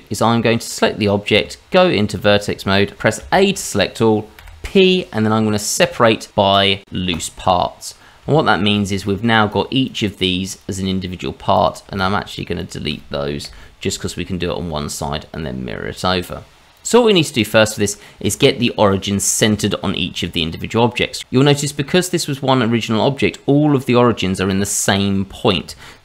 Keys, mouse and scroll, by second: 1.3 Tab, 3.2 a, 4.4 p, 8.2 Tab, 9.0 middle click, 9.5 click, 9.8 click, 10.1 click, 10.5 click, 11.5 click, 11.9 shift+click, 12.3 click, 12.5 shift+click, 13.4 Delete, 15.1-15.5 scroll up 2, 15.9 middle click, 16.8 click, 21.0 scroll up 2, 21.2 click, 24.5 click.